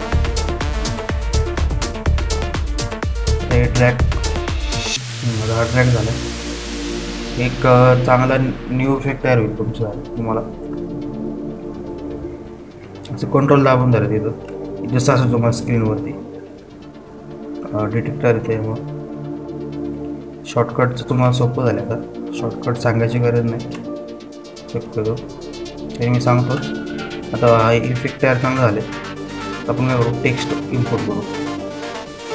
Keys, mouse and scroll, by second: 6.7 ctrl+alt+scroll down 1, 10.3 ctrl+t, 11.8 alt+scroll up 1, 13.5-13.9 typing, 14.4-20.6 ctrl+drag, 15.4 typing, 17.3 typing, 20.6-26.2 ctrl+drag, 27.2 alt+scroll down 1, 31.6-32.3 drag.